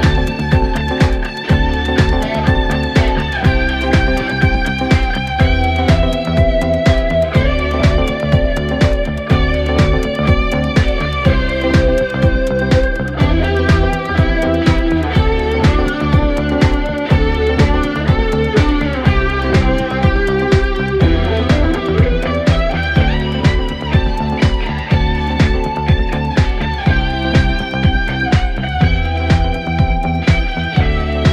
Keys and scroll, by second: 5.2 ctrl+z, 7.4 ctrl+z, 30.2 ctrl+z.